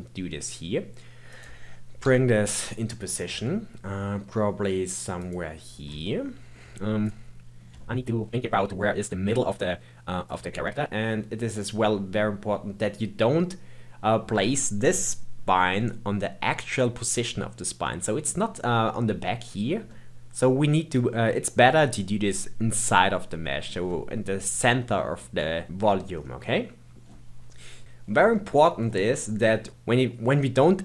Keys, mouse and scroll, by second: 2.0 KP_3, 2.7-3.3 scroll up 2, 3.3 g, 6.0-7.0 shift+middle drag, 7.0 click, 7.8-9.3 shift+middle drag, 10.2 click, 10.6-13.5 middle drag, 13.9-15.9 scroll down 2, 15.9-26.1 middle drag, 26.1-26.4 scroll up 2, 26.4-27.8 middle drag, 28.3-29.7 middle drag, 29.7 click.